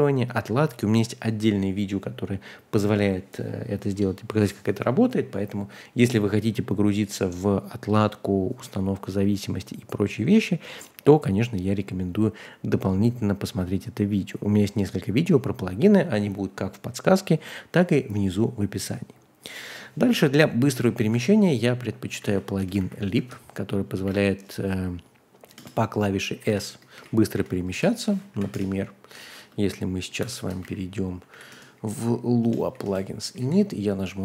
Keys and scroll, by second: 21.2 super+c, 22.2 a, 22.6 Return, 22.8 super+v, 23.1 Escape, 24.0 space, 24.0 w, 25.5 Return, 26.1-27.9 typing, 28.3 Page_Up, 28.5 Return, 29.3-34.2 typing.